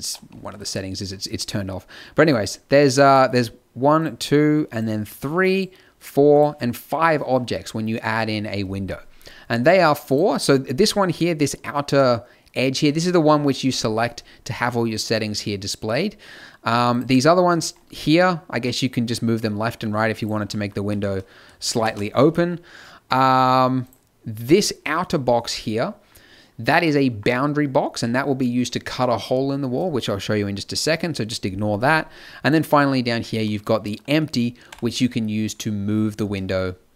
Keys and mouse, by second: 0.9 middle click, 2.4-8.3 drag, 10.1-18.8 drag, 20.5-22.4 middle drag, 20.8 z, 21.8 ctrl+z, 23.8-25.0 drag, 27.4 click, 27.9 n, 32.4-34.7 drag, 34.7 g.